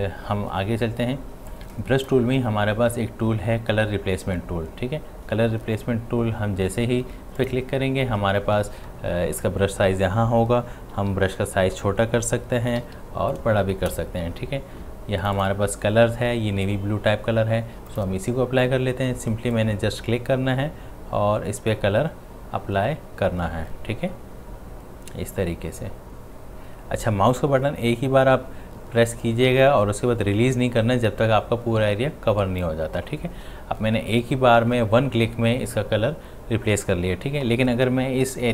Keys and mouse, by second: 1.5-4.3 drag, 7.4 click, 10.9-13.8 typing, 15.2 click, 17.9-29.5 drag.